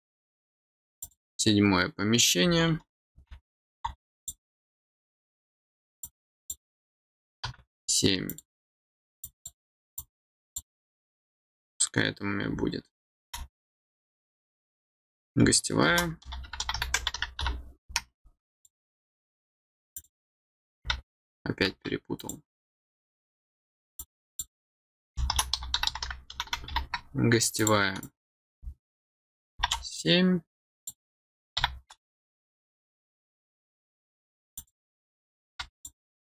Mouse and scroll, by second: 1.0 click, 4.1 click, 6.0 click, 8.2 click, 9.2 click, 9.9 click, 18.5 click, 19.9 click, 22.1 click, 23.9 click, 27.5 click, 28.0 click, 30.5 click, 34.5 click, 35.7 click.